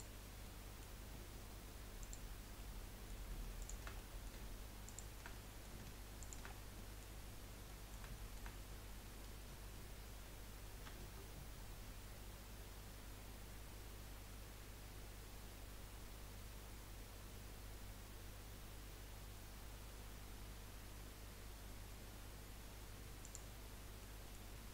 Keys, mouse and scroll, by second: 0.4-2.0 middle drag, 2.0 click, 2.6 middle click, 3.6 shift+click, 3.9 middle click, 4.8 shift+click, 5.3 middle click, 6.2 shift+click, 6.5 scroll down 2, 6.8 middle click, 7.2-7.5 scroll up 1, 7.6-10.8 middle drag, 10.8 ctrl+b, 24.0 middle click.